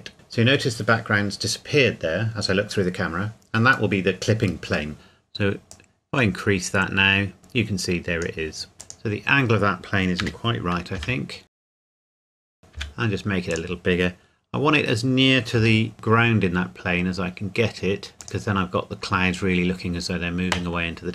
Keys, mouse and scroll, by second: 0.1 KP_0, 2.6 scroll up 1, 5.7 click, 10.2-12.8 typing, 11.6 Escape, 12.2 click, 12.5 click, 13.5 click, 14.2-15.6 scroll up 1, 15.6 g, 18.2 click.